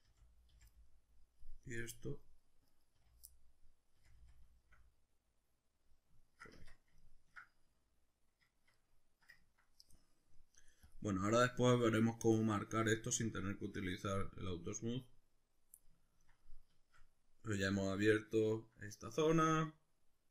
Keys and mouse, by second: 0.1 f, 1.6 right click, 2.0 middle click, 2.7 right click, 3.0 f, 3.3-10.9 middle drag, 4.0 f, 6.5 Tab, 7.7 z, 10.9 click, 12.8 click, 14.1-20.3 middle drag.